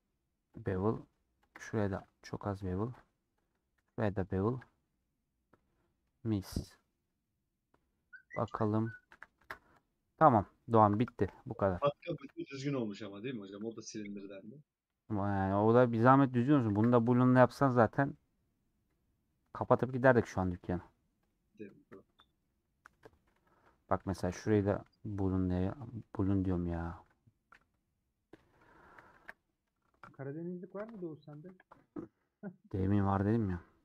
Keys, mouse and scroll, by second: 0.9 middle click, 1.3 alt+click, 1.7 ctrl+b, 3.4 alt+Left, 3.7 ctrl+b, 4.7 scroll down 2, 4.9-6.2 middle drag, 6.2 scroll down 3, 6.4 middle click, 7.0 scroll up 2, 7.2-8.9 middle drag, 8.9 scroll down 1, 9.1 a, 10.1 scroll down 1, 12.2 /, 12.6 scroll down 1, 12.9 click, 13.3 middle click, 13.5 scroll up 2, 14.1 middle click, 14.6-15.1 scroll up 2, 15.1-16.8 middle drag, 16.8 ctrl+s, 17.6-18.1 scroll down 2, 18.1-20.0 middle drag, 20.0 scroll up 2, 21.3 click, 21.7 KP_Decimal, 22.4 scroll down 2, 22.6 middle click, 22.9 Tab, 25.9 scroll down 1, 25.9-27.5 middle drag, 27.5 /, 28.3-28.7 scroll down 2, 28.8 a.